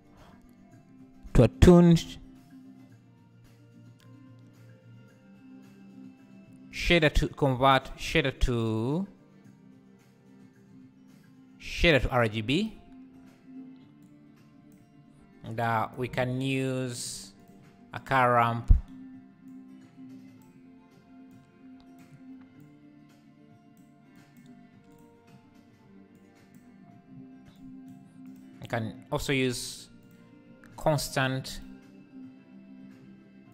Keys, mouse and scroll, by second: 13.2 scroll up 4, 15.6 click, 17.5 shift+a, 19.5-26.8 drag, 27.6-30.6 drag, 30.6-31.6 scroll up 1, 31.6-33.5 drag.